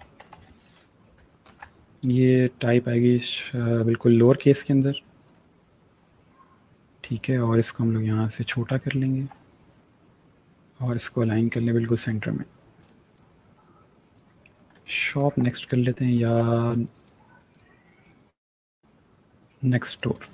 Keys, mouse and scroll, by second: 0.0-0.6 typing, 1.3 ctrl+a, 2.4 click, 7.2 shift+click, 8.7 alt+scroll down 1, 9.2 scroll down 1, 10.7 click, 14.6 alt+scroll up 1, 15.3-16.0 scroll up 1, 16.0-16.7 alt+scroll up 2, 16.7 click, 20.2-20.3 typing.